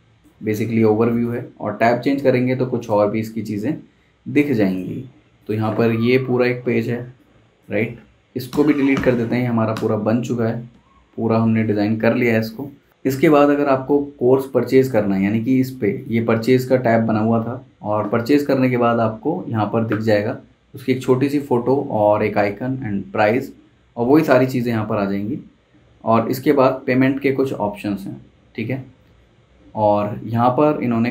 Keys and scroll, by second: 8.5 \, 9.7 BackSpace, 10.7 super+s.